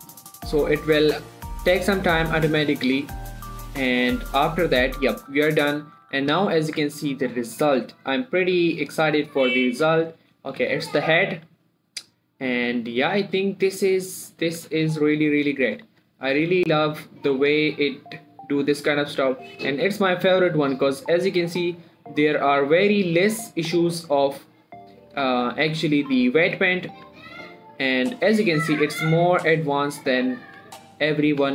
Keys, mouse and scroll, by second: 5.4 scroll up 1, 5.8 shift+middle click, 6.4 click, 6.8 scroll down 1, 7.1 Tab, 8.7 click, 9.6-10.2 scroll up 1, 10.2 click, 10.8 g, 11.5 right click, 11.7 r, 14.0 right click, 14.7 click, 14.9 r, 15.3 right click, 16.1 click, 16.4 shift+scroll up 1, 16.6 g, 21.8 right click, 22.5 click, 23.0 g, 24.2 right click, 24.8 click, 25.8 shift+middle click, 26.0 g, 26.8 right click, 27.3 click, 27.4 g, 30.2 right click, 30.7 click, 30.9 g, 31.3 right click.